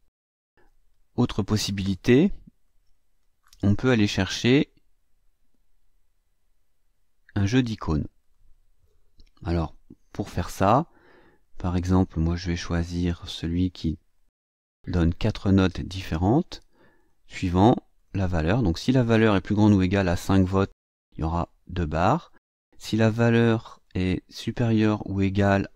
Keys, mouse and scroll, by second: 1.8 click, 2.6-3.5 drag, 4.4 click, 8.2 click, 9.8-10.4 drag, 11.4 click, 14.1 click, 16.9 click, 17.9 click, 18.4 click, 19.9 KP_5, 23.0 click, 23.8 click, 24.5 click.